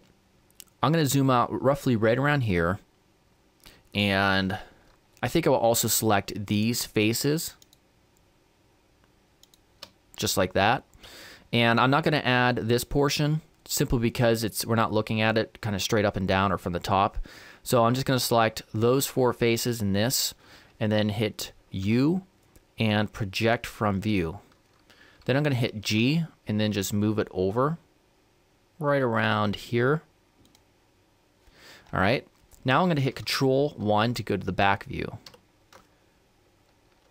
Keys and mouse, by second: 6.6-9.4 right drag, 9.5-11.2 right drag, 21.9 u, 25.9 g.